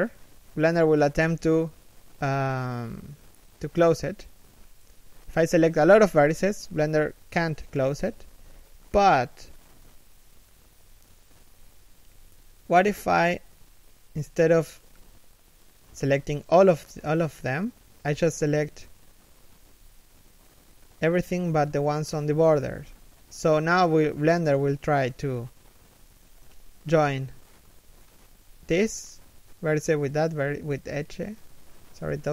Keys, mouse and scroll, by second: 0.4 alt+right click, 1.1 f, 12.5 a, 14.8 right click, 15.3 alt+right click, 16.7 middle click, 22.5 shift+right click, 24.3 middle click, 27.9 right click, 28.5 shift+right click.